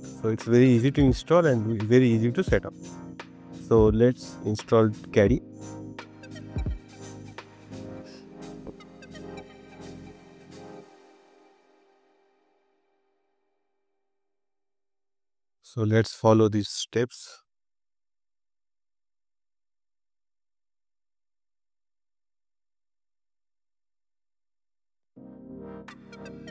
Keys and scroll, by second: 7.6 BackSpace, 15.9 super+c, 18.2 super+v, 24.3 super+c, 25.0 super+v.